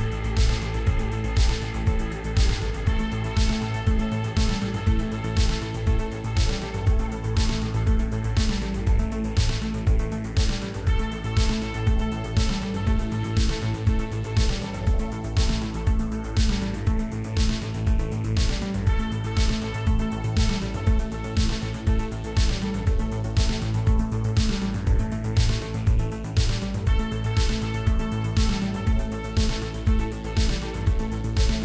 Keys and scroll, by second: 2.7 shift+d, 2.9 x, 4.7 shift+r, 5.4 alt+a, 19.6 Tab, 23.4 i, 27.6 i, 30.2 e.